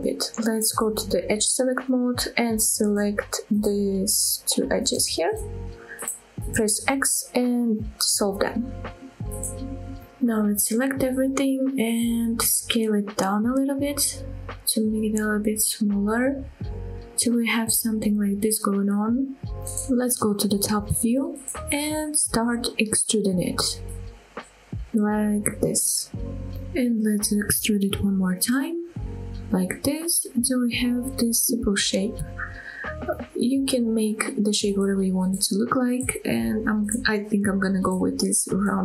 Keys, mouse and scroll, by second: 1.1 click, 4.1 scroll down 1, 4.3 middle click, 4.7 scroll up 1, 5.3 click, 6.0 shift+click, 6.8 x, 8.8 scroll up 1, 9.3 shift+middle click, 9.7 scroll down 1, 10.0 middle click, 10.6 click, 13.3 s, 16.4 click, 16.7-19.0 middle drag, 19.3 scroll down 1, 19.6 middle click, 20.8 KP_7, 21.3-21.7 scroll up 3, 21.9 shift+middle click, 22.3 scroll up 1, 22.8 shift+middle click, 23.4-23.9 shift+scroll down 1, 23.9 e, 26.8 click, 27.8 e, 30.8 click, 31.1 scroll down 2, 32.2-32.7 scroll down 1, 32.7 middle click, 33.6-34.1 scroll up 2, 37.4 KP_7, 37.9-38.3 scroll up 2, 38.5 shift+middle click.